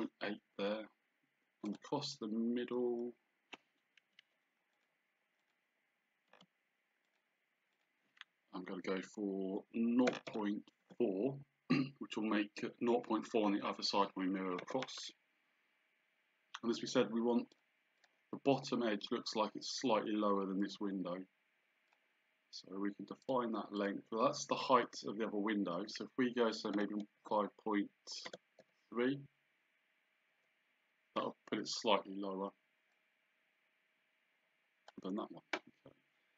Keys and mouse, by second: 1.7 click, 4.0 Escape, 4.8 click, 6.4 d, 7.1 click, 10.1 KP_0, 14.6 Return, 17.5 click, 18.1 click, 21.9 click, 23.3 click, 26.8 KP_5, 28.3 BackSpace, 28.6 KP_3, 30.3 Return, 33.0 click.